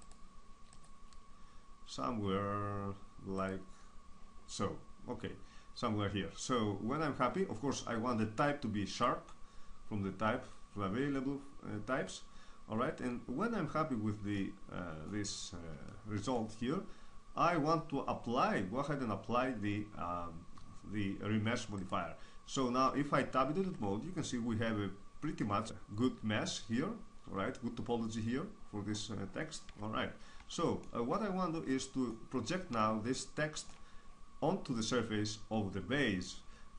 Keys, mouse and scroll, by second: 0.0-2.1 right drag, 2.1 click, 3.3-5.6 drag, 4.5-7.5 middle drag, 7.8-8.8 middle drag, 8.8-11.9 drag, 12.0-17.6 middle drag, 21.7-23.6 drag, 23.6 Tab, 24.5-27.8 middle drag, 29.6 Tab, 34.3 click.